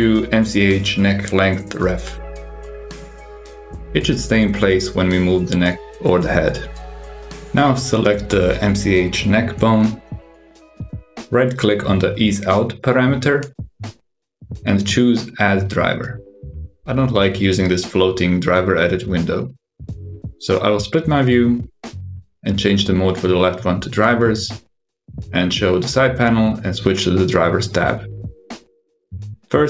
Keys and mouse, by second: 0.3 F2, 5.2 ctrl+Tab, 5.4 g, 8.4 click, 14.4-18.0 drag, 20.3-21.4 drag, 22.5-23.9 drag, 24.9 click, 26.2 click, 27.5 click, 29.4 click.